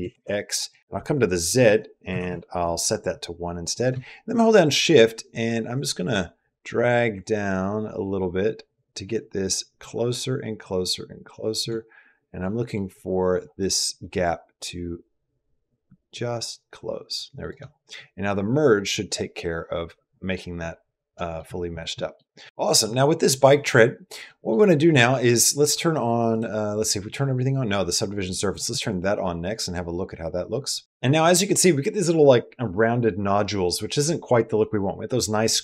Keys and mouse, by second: 1.3 click, 3.5-11.4 shift+drag, 12.2 middle click, 14.0-17.3 shift+drag, 20.9 middle click, 21.8 middle click, 22.4 shift+middle click, 22.4 shift+Tab, 22.4 shift+click, 24.1 middle click, 26.1 click.